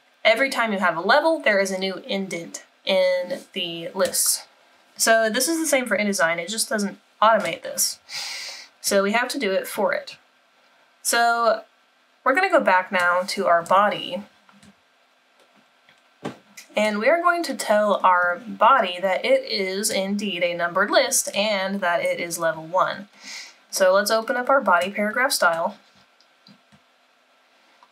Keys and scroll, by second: 13.9 super+-.